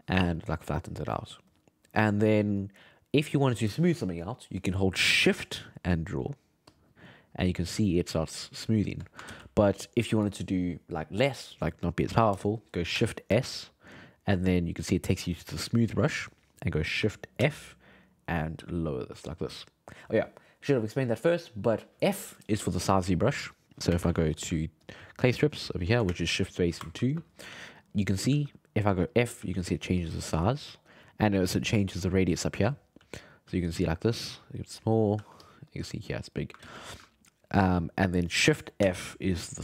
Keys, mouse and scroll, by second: 2.6-5.7 middle drag, 5.9-9.3 shift+drag, 9.3 ctrl+z, 13.3 shift+s, 17.4 shift+f, 22.6-23.9 drag, 23.9 shift+space, 24.3 f, 25.6 click, 26.1 shift+space, 27.5-30.3 typing, 33.0 f, 33.5 f, 34.1-35.1 drag, 35.1 f, 35.7 click, 36.6 ctrl+z, 36.9 ctrl+z, 38.8 shift+f.